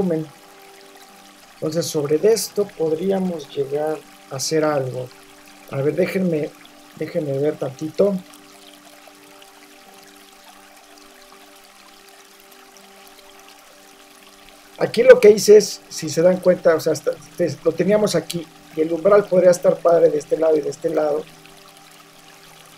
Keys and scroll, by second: 14.9 super+t.